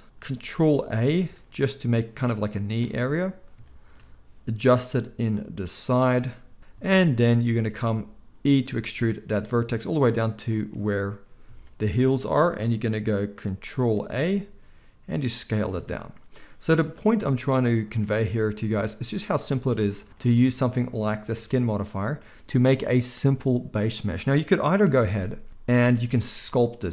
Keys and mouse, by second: 1.1 ctrl+a, 4.7 g, 8.6 e, 14.1 ctrl+a, 17.2 g, 24.8 Tab.